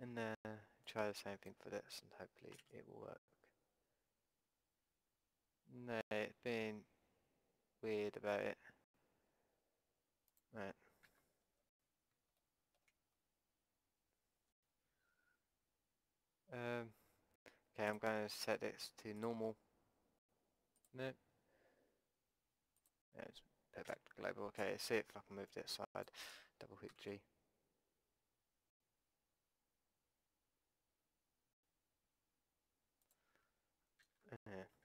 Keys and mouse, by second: 2.6 g, 11.1 ctrl+z, 17.9-19.9 drag, 20.8-22.8 drag, 23.9 a, 24.6 b, 26.9 g, 34.1 ctrl+z.